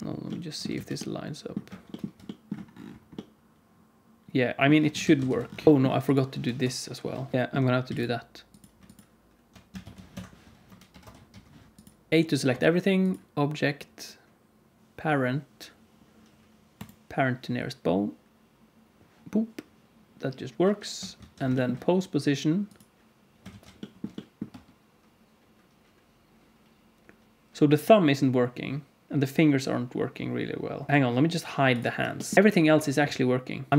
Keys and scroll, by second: 0.6 alt+z, 5.0 alt+a, 5.2 ctrl+s, 6.4 KP_0, 7.1 KP_1, 7.8 x, 9.8 shift+d, 10.8 ctrl+m, 12.1 a, 21.1 alt+a, 23.4 alt+shift+z, 24.4 space, 30.9 alt+shift+z, 30.9 space, 32.3 alt+shift+z, 32.3 h, 33.7 Home, 33.7 alt+h, 33.7 alt+a, 33.7 space.